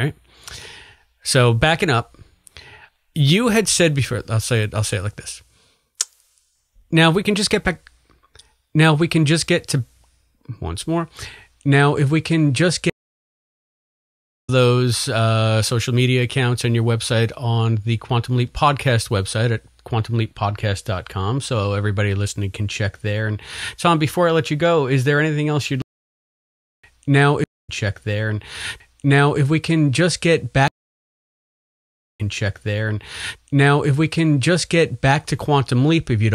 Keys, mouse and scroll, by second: 3.8 click, 5.4 click, 6.7-8.2 drag, 12.1-25.7 drag, 12.8 space, 14.4 space, 25.7 space, 26.3 ctrl+shift+Delete, 26.8 space, 27.4 space, 27.4 click, 27.6 space, 28.3 click, 28.9 click, 29.9 click, 30.6 space, 31.0 click, 32.0 click, 32.1 space, 34.2 ctrl+s, 35.2 click, 35.7 click, 36.2 click.